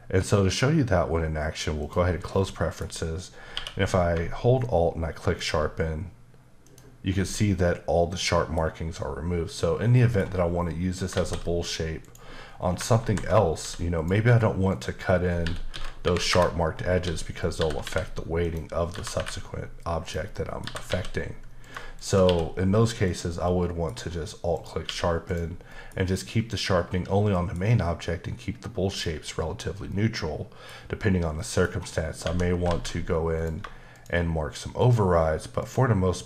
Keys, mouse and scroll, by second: 1.8 click, 2.4 middle click, 3.5 q, 5.4 alt+click, 6.6 alt+double click, 8.2 middle click, 9.9 middle click, 11.1 shift+a, 12.0 click, 12.5 scroll down 2, 13.0 alt+g, 14.0 click, 14.7 click, 15.4-17.8 typing, 16.3 KP_Enter, 17.4 click, 18.4 click, 19.2 typing, 20.0 click, 20.3 middle click, 20.6 typing, 21.6 click, 22.0 shift+click, 22.3 q, 23.0 click, 23.5 middle click, 24.0 scroll up 1, 24.5 click, 24.9 q, 25.3 click, 25.7 middle click, 27.3 middle click, 28.9 click, 29.9 middle click, 31.4 middle click, 31.7-32.2 scroll up 1, 32.2 Tab, 32.7 alt+z, 33.4 click, 33.9 shift+click, 34.8 shift+double click, 35.6 shift+click.